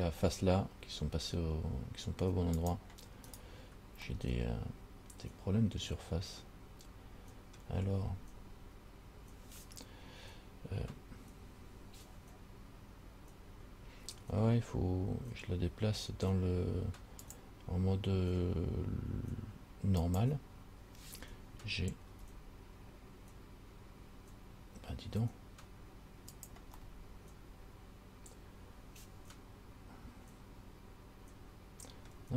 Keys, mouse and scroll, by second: 2.8 click, 3.6 right click, 4.3 middle click, 17.4 click, 20.3 click, 22.3 g, 27.0 middle click.